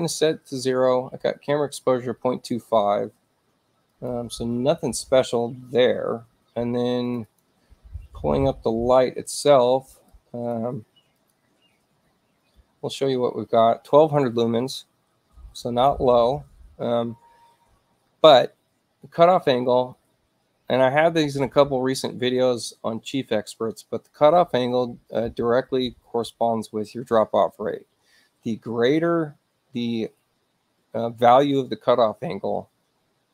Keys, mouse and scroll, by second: 3.9 click, 7.0 click, 7.2 click, 10.1 click, 11.1 click.